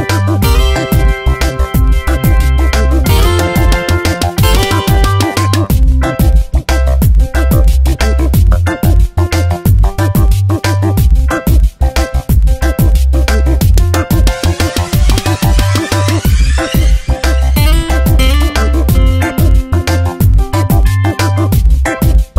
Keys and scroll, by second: 2.7 space.